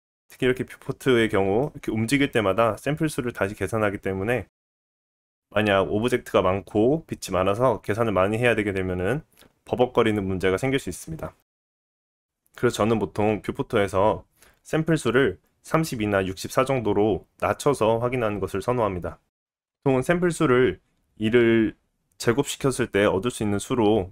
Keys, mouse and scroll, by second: 0.0-12.4 middle drag, 12.4-24.1 drag.